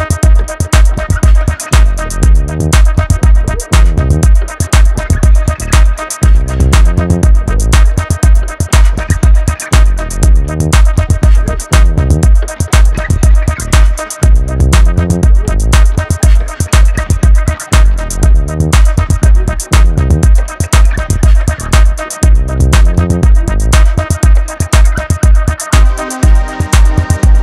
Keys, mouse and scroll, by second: 0.1 click, 2.1-2.4 scroll down 3, 2.4-5.5 middle drag, 6.3 click, 6.7-8.1 middle drag, 8.1 click, 9.5 KP_1, 10.6 click, 11.9 click, 18.5 scroll down 1, 18.8-21.7 middle drag, 21.7 KP_1, 22.5-23.1 shift+middle drag, 23.1 Tab, 23.7 scroll up 1, 23.8 middle click, 24.7 alt+click, 25.3 alt+click, 25.9-27.4 shift+middle drag.